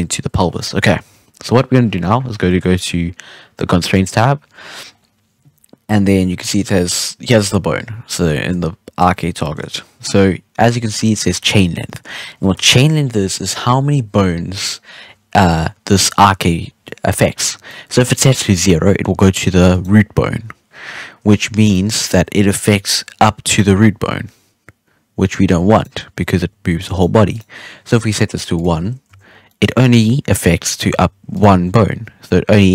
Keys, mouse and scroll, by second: 0.4-3.6 scroll down 3, 3.8 click, 4.6 scroll up 3, 4.8-5.8 scroll down 4, 5.8-7.9 scroll down 1, 7.9-9.4 scroll up 4, 9.4 shift+middle click, 9.6-11.1 scroll down 3, 11.9 scroll up 1, 12.0-15.1 scroll down 2, 15.3-15.8 middle drag, 15.8 scroll up 2, 15.9-19.7 middle drag, 19.7 right click, 21.6 right click, 22.7 g, 26.3 g, 27.3 right click, 28.5-29.0 drag, 29.0 z, 29.4-30.7 middle drag, 30.7 z, 31.3 right click, 31.6 g.